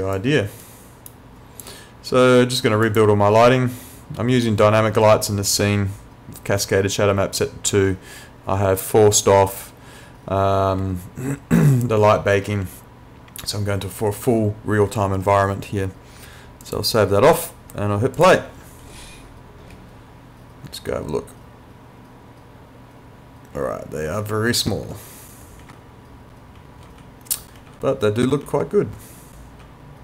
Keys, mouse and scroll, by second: 0.2 click, 0.6 right click, 1.1 click, 16.7 click, 19.7 w, 24.5 w, 25.6-27.8 typing, 29.0 w.